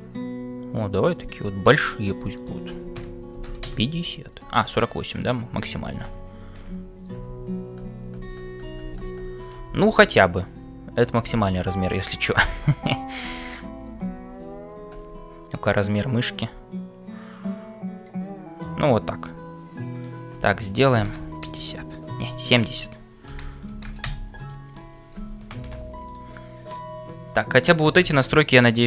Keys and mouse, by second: 19.9-24.8 drag, 26.2-28.3 drag.